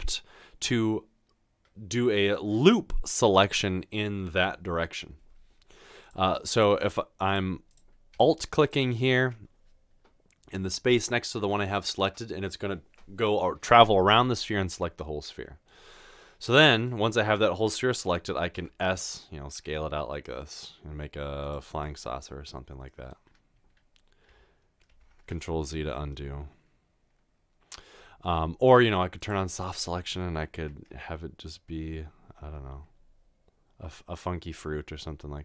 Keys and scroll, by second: 18.6 s, 25.0 ctrl+z, 30.9 s.